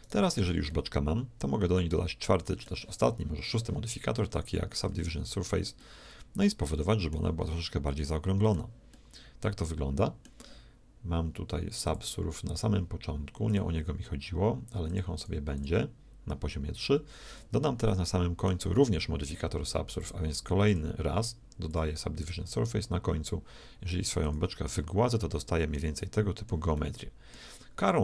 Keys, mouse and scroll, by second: 0.0-1.7 right drag, 0.7-2.7 middle drag, 4.9 ctrl+2, 5.8-10.7 middle drag, 11.9-17.2 drag, 17.9-19.7 middle drag, 20.0-22.5 drag, 24.2 click, 25.1-28.0 middle drag.